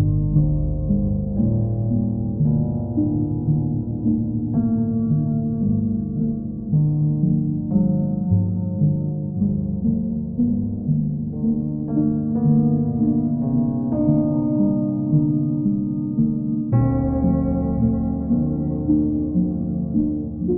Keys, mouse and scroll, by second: 0.8 click, 1.8 click, 2.1 click, 3.1 click, 3.8 shift+click, 4.6 alt+click, 6.0 click, 8.1 click, 8.3 click, 9.3 alt+click, 10.6 alt+click, 11.6 ctrl+click, 12.9 ctrl+click, 15.4 click, 15.6 click, 16.4 alt+click, 17.4 w.